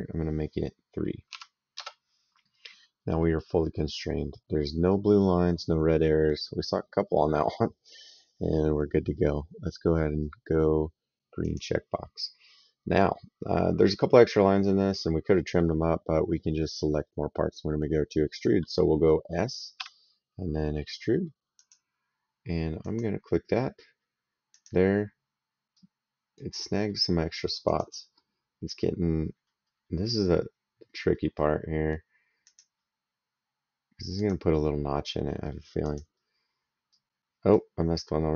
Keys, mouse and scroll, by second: 1.1 KP_3, 1.5 KP_Enter, 3.0 middle click, 4.7 right click, 11.2 click, 14.6 middle click, 19.6 s, 21.4 click, 22.6 click, 24.3 click, 25.5 right click, 27.4 click, 32.2 click, 34.0 click, 34.9 middle click, 35.6 click.